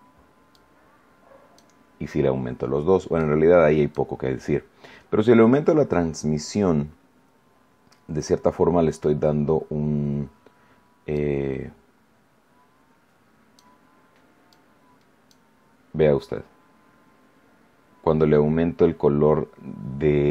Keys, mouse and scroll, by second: 0.5-1.7 drag, 3.1 click, 11.1-13.7 drag, 14.4-15.4 drag.